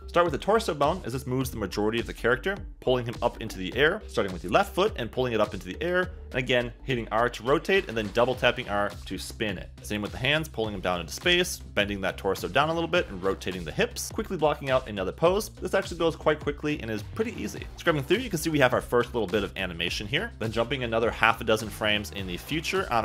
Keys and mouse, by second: 0.2 KP_3, 0.8 KP_1, 2.1 g, 4.0 h, 5.1 g, 7.6 r, 8.3 click, 8.4 g, 9.5-11.3 typing, 12.5 click, 13.3 r, 14.1 click, 14.3 g, 15.6 click, 15.6-18.2 typing, 16.7 middle click.